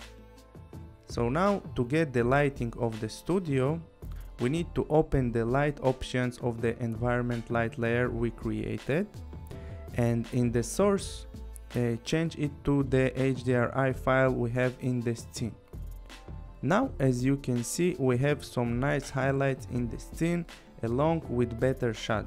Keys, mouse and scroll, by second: 5.1 click, 8.4 click, 11.1 click, 14.2 click, 16.4 click, 17.0 click, 18.8 click, 19.2-20.1 scroll, 21.6 click, 21.9 click.